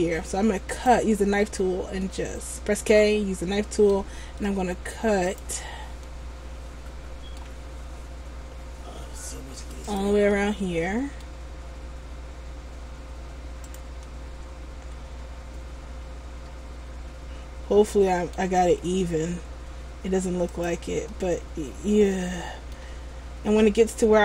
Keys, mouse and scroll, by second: 2.2 middle click, 6.2 middle click, 10.5 middle click, 14.2 middle click, 21.3 middle click.